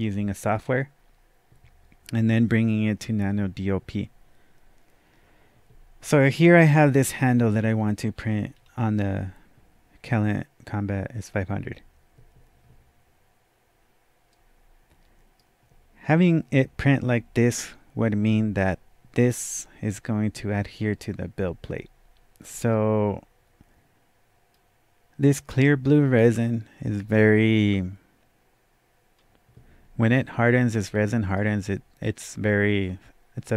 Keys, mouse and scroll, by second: 7.8 click, 7.8 scroll up 1, 8.5-8.8 scroll down 1, 14.3 scroll down 1, 14.3-17.9 right drag, 22.7-27.7 right drag, 22.7 scroll down 1, 27.7 scroll up 1, 28.6 scroll down 1, 28.9 scroll up 1, 29.0-29.5 scroll down 1, 30.2-33.5 right drag, 31.2-31.9 typing, 33.4-33.5 typing.